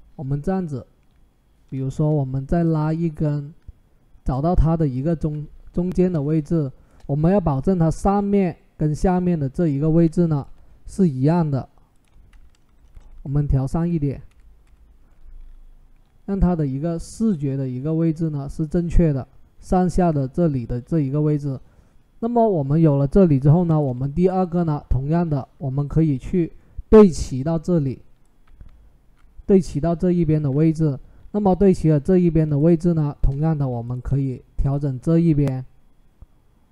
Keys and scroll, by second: 12.7 Up, 12.9 Up, 13.5 Up, 14.1 Up, 14.4 Up, 28.2 Down, 28.4 Down.